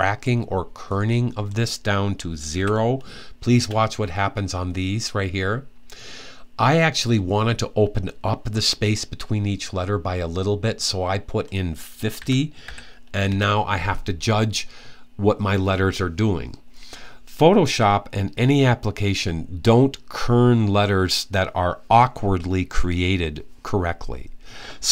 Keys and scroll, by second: 2.3 0, 11.7-12.9 typing.